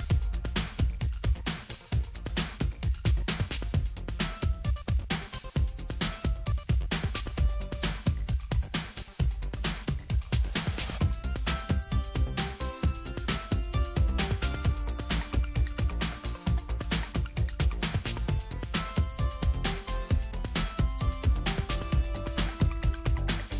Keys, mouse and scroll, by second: 3.7-8.6 drag, 10.4-12.7 drag, 14.0-15.8 drag, 16.5 click, 20.3-21.5 drag, 23.3 click.